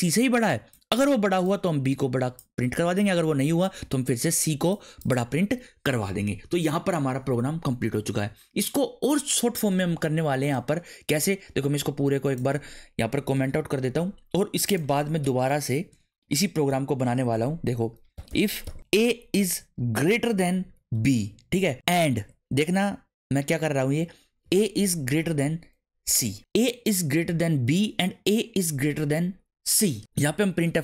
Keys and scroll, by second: 13.3 ctrl+/, 15.2 Return, 15.9 Return, 16.2 Up, 17.0 Tab, 18.0-22.6 typing, 24.4 a, 25.1 shift+., 26.0 c, 30.3-30.8 typing.